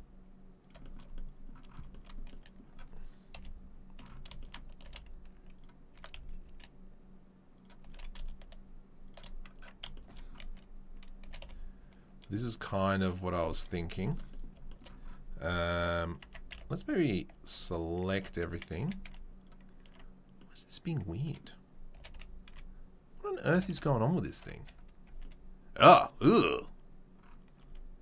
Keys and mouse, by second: 3.3 KP_3, 4.8 g, 5.9 s, 7.8 g, 11.2 g, 16.2 Tab, 16.5 a, 17.3 Tab, 18.1 Tab, 18.7 a, 19.0 z, 19.9 Tab, 21.9 g, 23.5 g, 24.3 Tab, 25.0 a, 27.6 Tab.